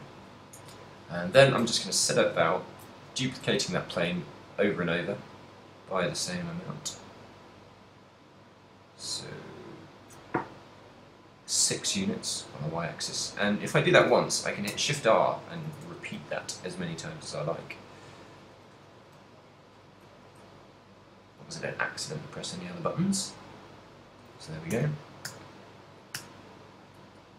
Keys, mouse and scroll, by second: 0.7 KP_7, 1.6 ctrl+middle click, 2.2 shift+middle click, 2.7 ctrl+middle click, 3.0 z, 4.0 shift+d, 13.1 click, 14.1 shift+r, 14.8 shift+t, 18.3 click, 19.2 g, 20.2 right click, 20.6 shift+d, 24.0 click, 24.9 shift+r, 25.4 shift+r, 26.3 shift+r.